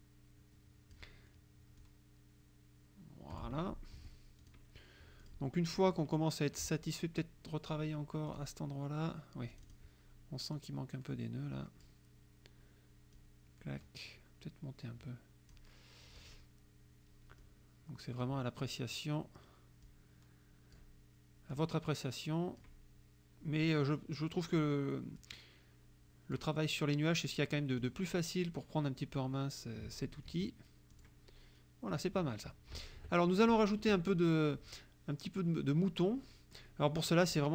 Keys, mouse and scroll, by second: 1.8-3.6 drag, 4.0 F1, 4.5 click, 5.3 click, 5.8 click, 8.3 click, 9.5 click, 10.6-12.1 drag, 13.2-15.8 drag, 16.2 click, 17.5 click, 19.9-21.0 drag, 21.6-22.9 drag, 23.7 click, 25.3-26.5 drag, 27.8 click, 29.0-30.2 drag, 30.3 F1, 30.9 click, 32.7 KP_Subtract, 34.0 click, 36.3 click.